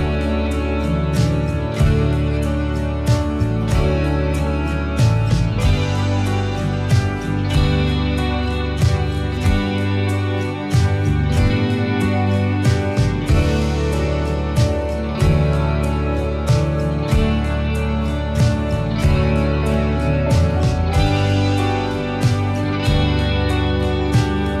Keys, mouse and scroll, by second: 0.1-1.3 middle drag, 0.9 click, 1.7 middle click, 2.1-2.9 drag, 3.2 middle click, 4.1 click, 4.8 click, 5.9-7.0 middle drag, 7.0 click, 8.5-11.1 middle drag, 10.8-11.7 drag, 11.4-13.4 middle drag, 13.4 click, 14.3-15.7 middle drag, 15.6 click, 17.0-18.1 middle drag, 18.0 click, 18.8 click, 19.8-21.4 middle drag, 21.4-22.8 drag, 23.5-24.6 middle drag.